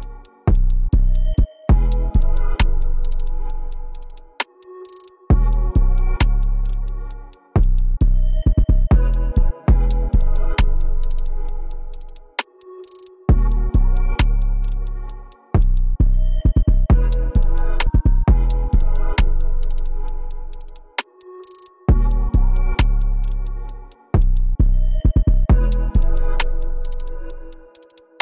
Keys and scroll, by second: 1.3 t, 9.8 t, 12.3 ctrl+l, 13.0 e, 15.4 ctrl+x, 15.7 ctrl+b, 16.8 p.